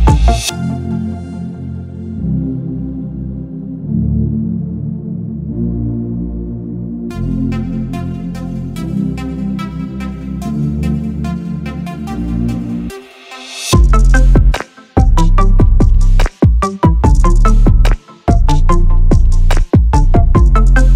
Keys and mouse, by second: 0.1-3.5 drag, 4.8 click, 6.9 click, 8.7 click, 10.6-12.2 drag, 15.4 click.